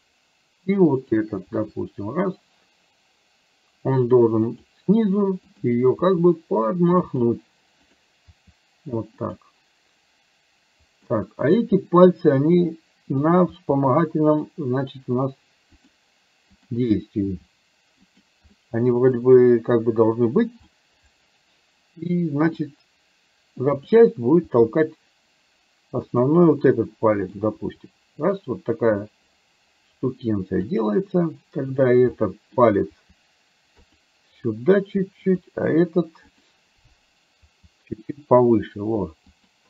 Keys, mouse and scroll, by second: 1.1 click, 1.5 r, 6.1 r, 8.0 click, 8.4 r, 11.2 middle click, 13.7 r, 16.6 click, 17.4 r, 18.6 middle click, 20.9-22.6 middle drag, 23.9 click, 24.5 r, 26.6 middle click, 27.7 r, 31.7 click, 32.2 middle click, 32.9 r, 35.4 click, 36.4 click, 37.5 r.